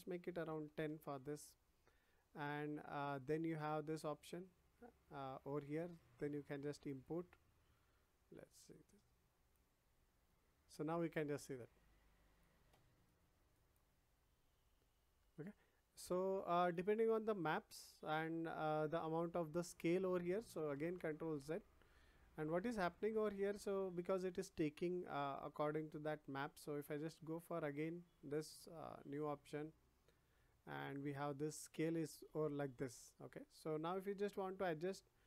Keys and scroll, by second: 0.2 1, 0.5 0, 0.8 Return, 20.7 ctrl+z.